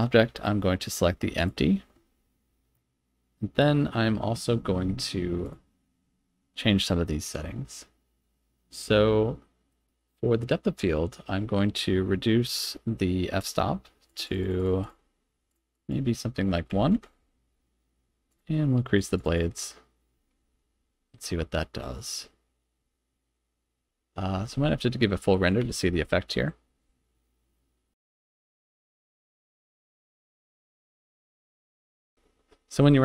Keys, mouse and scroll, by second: 14.0 click, 14.2 click, 14.3 click, 14.5 click, 14.7-18.3 drag, 18.9 click, 19.1 click, 19.3 click, 20.5 z, 22.0-22.4 scroll up 3, 22.7-23.4 scroll up 2, 23.9 z, 25.8 F12.